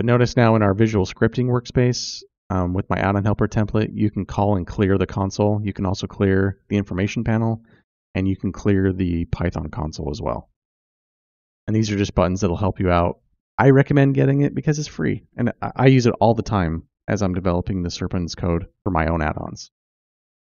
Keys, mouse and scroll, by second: 0.5 click, 2.8 click, 2.9 typing, 4.4 click, 4.5 typing, 4.8 click, 6.0-6.8 typing, 6.1 click, 7.8 typing, 8.9 click, 13.2 click, 15.1-16.0 typing, 16.8-18.6 click, 18.6 ctrl+space.